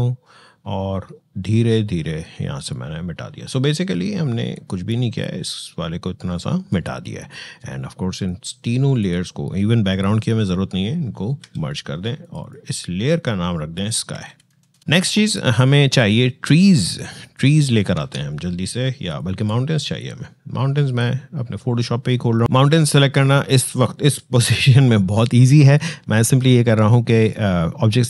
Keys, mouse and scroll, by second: 11.2 ctrl+e, 12.0 click, 13.9 s, 15.7 click, 17.7 alt+Tab, 18.9-22.4 alt+drag.